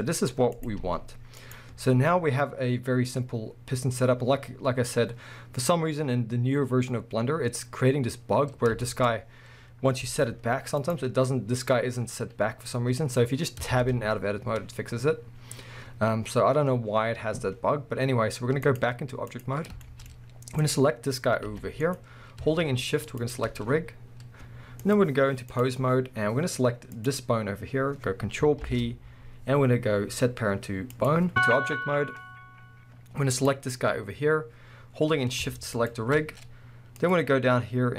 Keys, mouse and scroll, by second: 0.0 scroll up 1, 0.5 click, 0.8 g, 1.5 right click, 3.3-4.3 scroll up 1, 8.5-8.9 scroll up 1, 8.9-10.9 shift+middle drag, 9.1 scroll up 1, 9.6 scroll down 1, 10.0 g, 10.9 right click, 13.6 Tab, 15.4 scroll down 1, 15.8 scroll up 1, 18.6-19.8 drag, 19.8-20.6 shift+middle drag, 20.2-20.6 scroll up 2, 20.6 click, 21.5 g, 22.0 right click, 23.2 shift+click, 24.8-27.1 drag, 28.6 ctrl+p, 31.3-33.5 drag, 35.8 shift+click, 37.0-37.9 drag.